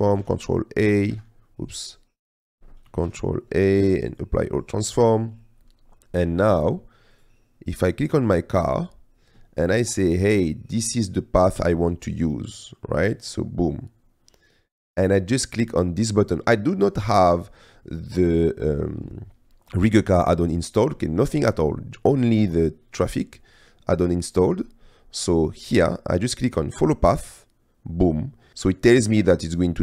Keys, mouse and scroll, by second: 0.4 shift+a, 3.2 shift+a, 27.3-29.8 drag.